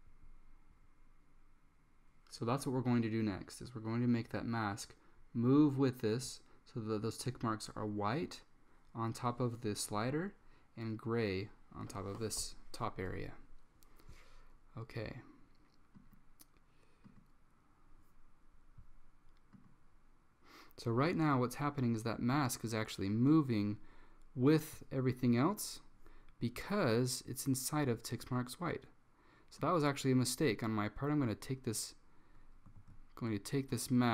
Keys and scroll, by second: 32.9 super+z.